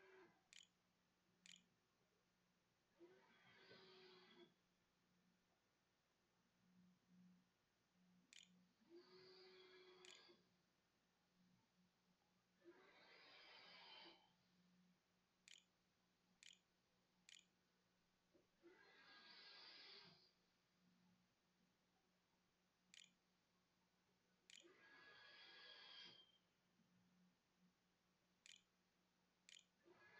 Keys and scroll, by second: 0.0-1.8 typing, 6.3 Tab, 8.2-9.5 typing, 11.2 o, 12.3-18.5 typing, 22.0-25.0 typing, 26.5 7, 27.5-30.1 typing.